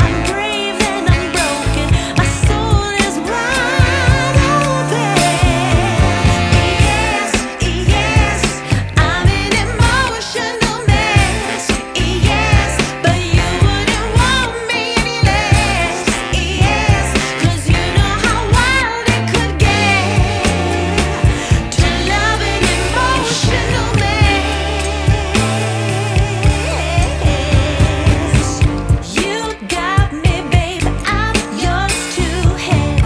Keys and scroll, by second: 8.6 super+z, 10.9 super+t, 14.8 super+t.